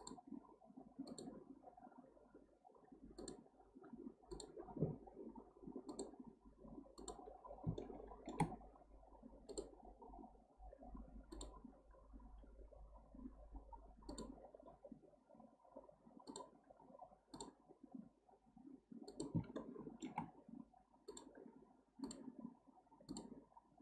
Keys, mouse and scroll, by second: 7.3-7.8 scroll up 1, 7.8-10.9 shift+middle drag, 12.1 scroll up 1, 14.5-15.0 scroll down 2, 19.5-22.5 shift+middle drag.